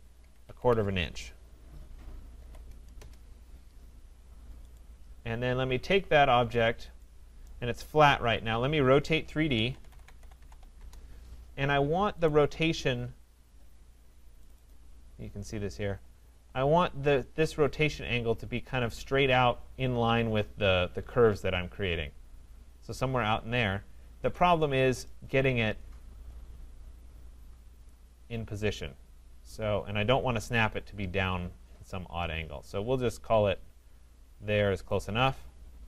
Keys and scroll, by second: 3.0 Return, 10.8 Return.